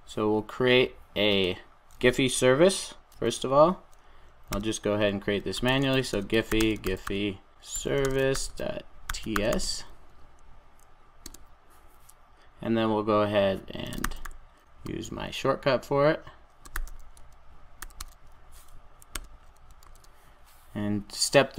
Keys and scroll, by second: 4.4 super+n, 19.2 Return.